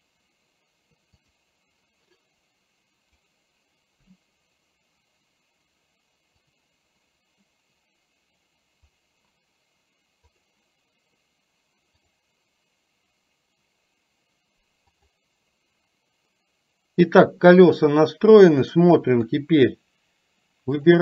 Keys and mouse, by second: 1.2 click, 19.3 KP_3, 20.8 click.